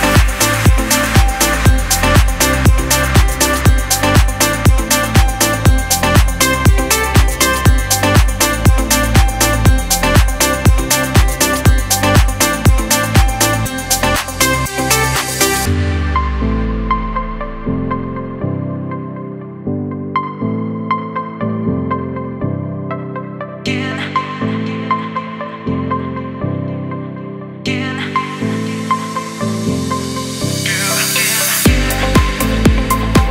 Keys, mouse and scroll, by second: 9.1 click, 10.8 alt+scroll up 1, 11.8-13.5 alt+shift+drag, 16.7 alt+scroll down 1, 18.8 space, 18.9 click, 19.3 space, 20.4 click, 21.0 alt+scroll up 1, 22.8 typing, 23.0 click, 27.9-29.4 scroll up 1, 29.4-33.3 drag.